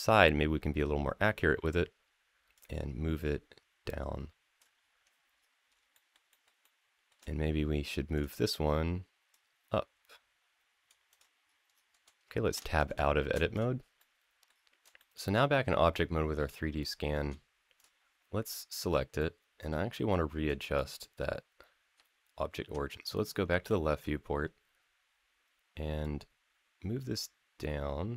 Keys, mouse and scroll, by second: 2.3-4.4 drag, 2.9-3.5 scroll up 1, 4.6-5.6 scroll down 6, 5.7 shift+middle click, 6.1 shift+middle click, 6.4 shift+middle click, 7.1-7.5 scroll up 3, 7.9 click, 9.1-10.7 drag, 10.9 click, 11.2-11.7 scroll down 4, 12.4 Tab, 13.3 click, 13.8-14.3 middle drag, 14.3 scroll down 2, 14.8 shift+middle click, 15.1-17.1 middle drag, 17.5 click, 18.2 click, 19.0 middle click, 23.1 scroll up 2, 25.8-28.1 drag.